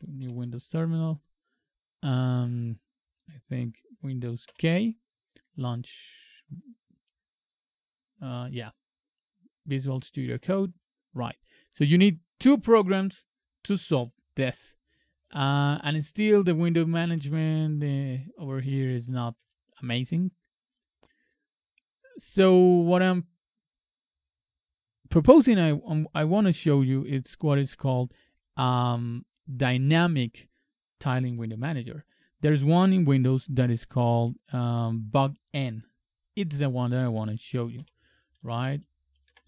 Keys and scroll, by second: 0.2 alt+F4, 4.5 super+k, 17.1 super+Up, 19.4 super+Up.